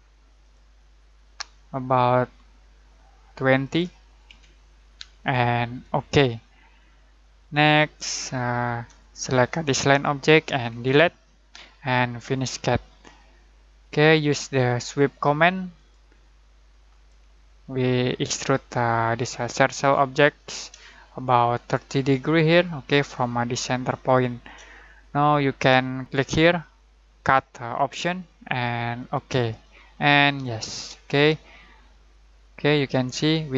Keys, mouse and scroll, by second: 0.4 click, 3.6 click, 4.2 2, 5.8 click, 6.8 scroll down 1, 8.7 Escape, 9.6 click, 10.7 Delete, 11.3 middle click, 12.3 click, 13.9-15.7 middle drag, 14.3 typing, 15.7 click, 18.1 middle click, 18.4 typing, 18.7-20.8 shift+middle drag, 20.8-26.0 shift+middle drag, 20.8-21.2 typing, 24.7-25.1 typing, 26.0-27.3 drag, 26.4 typing, 31.1-33.5 shift+middle drag, 31.1 typing.